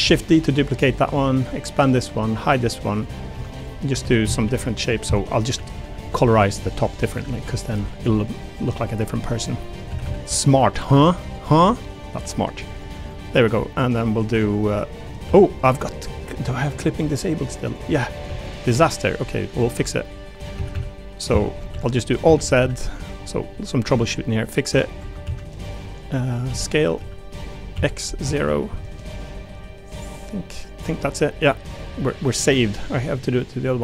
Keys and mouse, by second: 0.0 shift+d, 1.4 click, 2.5 click, 2.9 click, 3.3 Tab, 4.0-7.7 typing, 9.2 click, 9.9 a, 10.0 a, 10.3 b, 11.5 g, 12.7 click, 13.0 click, 14.1 2, 14.7 click, 15.2 1, 15.6 click, 17.0 click, 17.7 click, 18.3 a, 19.7 middle click, 20.5 a, 20.7 a, 21.2 middle click, 22.2 alt+z, 22.4 a, 22.6 a, 22.8 b, 25.2 ctrl+z, 26.4 s, 27.0 z, 27.7 x, 28.0 0, 28.2 Return, 32.0 Tab, 33.6 click.